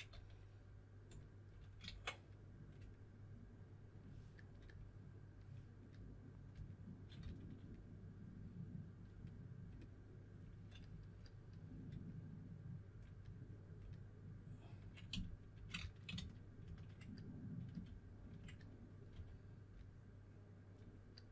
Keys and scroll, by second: 0.0 s, 1.8 super+z, 7.1 s, 14.9-16.5 typing, 17.8 shift+f, 18.1 shift+f, 19.0 4.